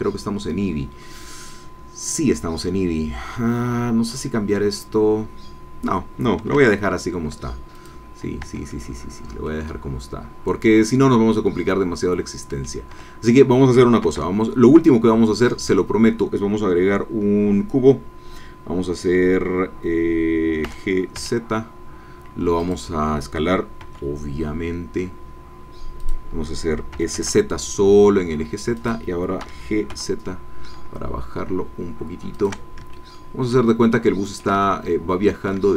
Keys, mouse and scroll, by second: 7.9 click, 8.5 Tab, 9.4-12.8 drag, 13.1 Tab, 14.0 shift+a, 15.4 click, 20.6 g, 21.1 z, 22.6 click, 23.8 s, 26.0 click, 26.9 s, 27.1 z, 28.7 click, 29.4 g, 29.9 z, 32.3 shift+click, 32.9 ctrl+shift+click, 33.9-35.6 ctrl+drag.